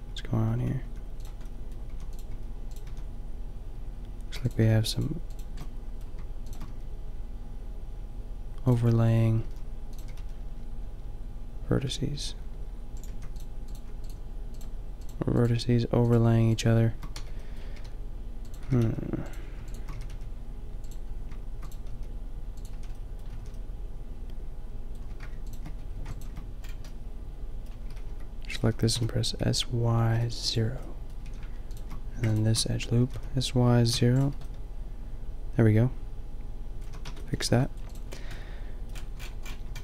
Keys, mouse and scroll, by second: 0.0-2.8 typing, 4.3 a, 6.7 g, 9.4 g, 10.1 g, 13.0 click, 13.1 a, 17.2 b, 17.8 g, 18.6 g, 19.3-22.4 drag, 19.9 g, 21.9 g, 22.8 a, 23.1-24.6 drag, 23.4 a, 26.0 a, 27.8 s, 28.6 s, 30.6-33.0 drag, 31.3 a, 32.1 a, 33.0 s, 33.2 click, 36.9 a, 37.0 Tab, 37.4 a.